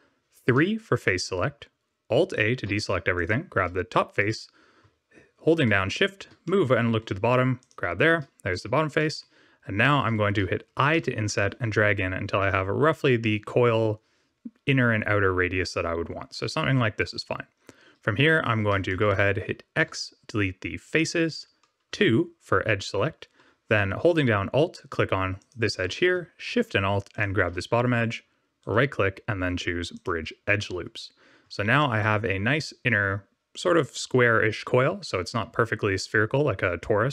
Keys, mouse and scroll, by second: 0.4 3, 2.4 alt+a, 3.1 click, 5.6 shift+middle click, 7.5 shift+click, 8.4 middle click, 9.1 shift+middle click, 10.9 i, 17.5 scroll up 3, 18.8 shift+middle click, 19.7 x, 21.8 2, 25.3 alt+click, 27.1 alt+shift+click, 28.5 right click, 31.4 Tab, 31.7 middle click.